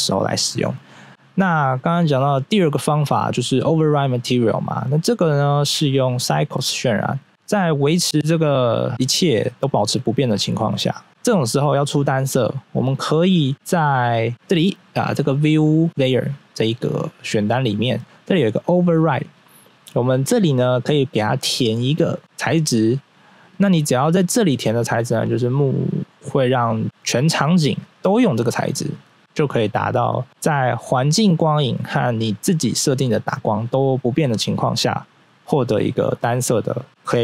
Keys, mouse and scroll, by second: 1.8 click, 2.3 click, 4.3 scroll up 1, 5.0 click, 6.0 click, 11.1 right click, 12.7 scroll down 1, 14.3 click, 18.8 click, 19.1 click, 20.8 click, 21.6 scroll down 1, 23.4 click, 25.5 scroll up 1, 29.2 middle click, 30.3 middle click, 34.8 scroll down 1.